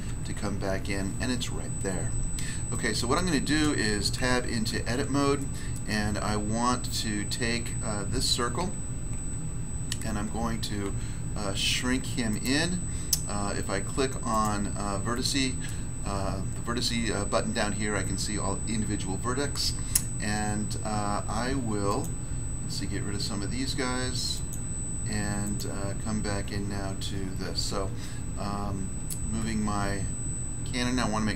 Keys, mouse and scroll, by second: 0.1 1, 3.1 middle click, 4.1 Tab, 5.7 middle click, 6.0 scroll up 1, 6.8 middle click, 7.3 middle click, 8.6 Tab, 9.1 Tab, 10.8 s, 12.4 click, 14.3 click, 14.3 s, 15.1 middle click, 15.6 middle click, 21.8 click, 24.3 click, 25.4 click, 27.6 1, 29.6 1.